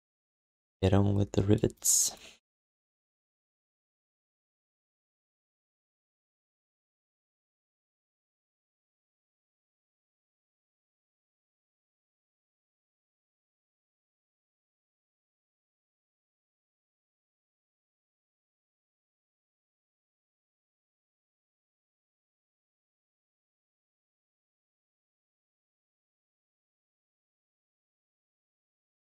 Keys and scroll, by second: 0.1 alt+shift+d, 0.8 1, 5.5 alt+q, 11.2 alt+q, 14.5 q, 15.6 alt+shift+d, 15.9 ctrl+s, 23.0 ctrl+s, 23.7 1.